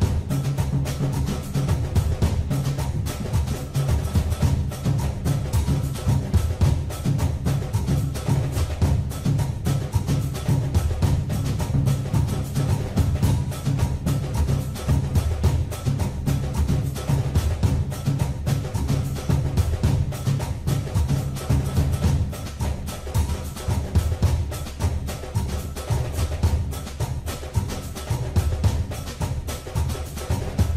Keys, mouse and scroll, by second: 4.6 click, 5.9 scroll down 2, 6.9 click, 11.1 KP_1, 12.8 KP_3, 14.1 KP_1, 17.5 click, 22.6 click, 24.2 shift+a, 29.8 click.